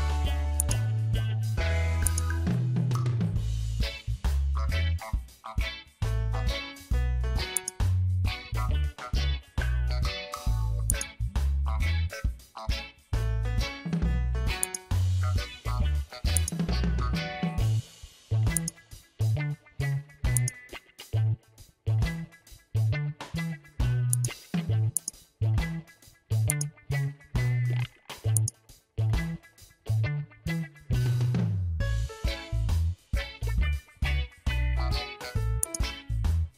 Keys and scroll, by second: 30.9 Caps_Lock.